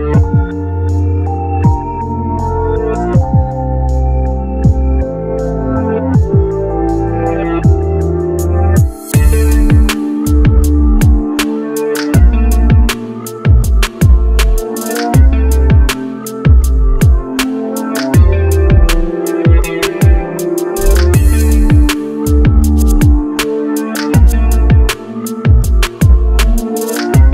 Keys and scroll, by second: 5.9 ctrl+shift+z, 24.8 shift+z.